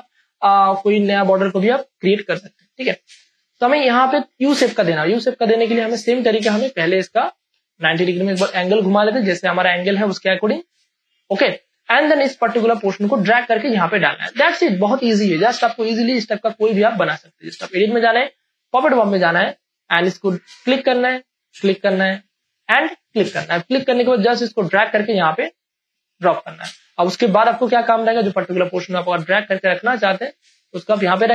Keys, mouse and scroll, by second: 2.6 space, 3.0 ctrl+click, 5.2 ctrl+click, 5.2-7.1 drag, 7.1 ctrl+t, 7.8 shift+click, 10.5 click, 11.7 space, 11.9 click, 12.2 space, 16.3 Return, 17.7-26.2 drag, 26.2 ctrl+space, 26.4 ctrl+click, 26.7 ctrl+space, 27.2 click, 27.4 ctrl+space, 28.4-31.0 drag, 28.4 space, 31.0 space, 31.2 ctrl+click.